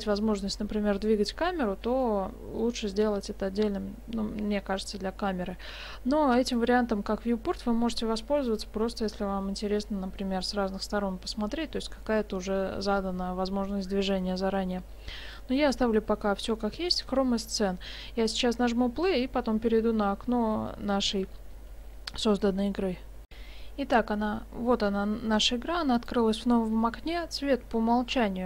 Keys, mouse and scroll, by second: 6.5 click.